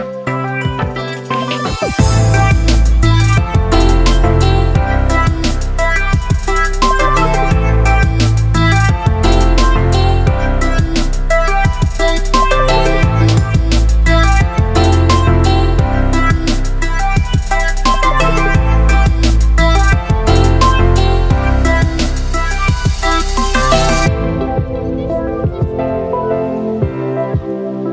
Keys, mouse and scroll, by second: 0.7 click, 3.9-6.8 drag, 6.8 ctrl+space, 6.8 ctrl+click, 7.2 ctrl+space, 8.7 shift+click, 13.3-15.3 typing, 13.5 click, 15.0 click, 16.2 shift+click.